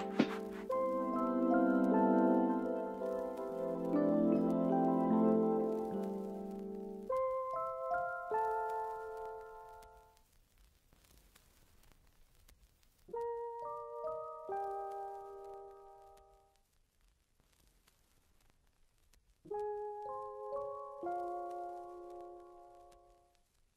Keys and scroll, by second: 2.9 1, 6.1 a, 7.0 m.